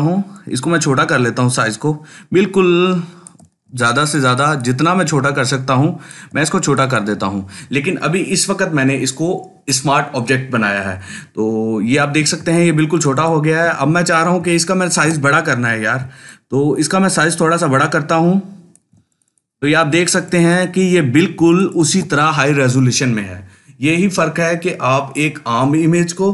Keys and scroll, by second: 3.5 ctrl+space, 4.0 ctrl+space, 14.7 ctrl+t.